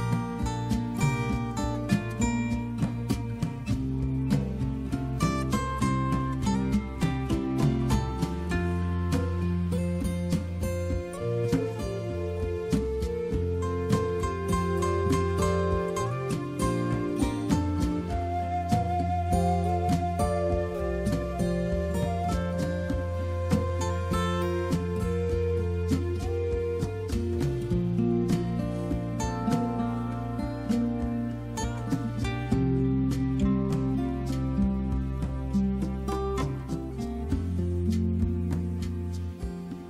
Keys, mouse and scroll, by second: 3.0 click, 5.7 click, 10.9 click, 15.8 click, 16.0 click, 16.4 click, 16.8 click, 19.3 click, 24.0 scroll down 1, 26.8 click, 27.8 click, 30.8 click, 33.8 click, 33.9 click, 34.8 click, 36.5 click.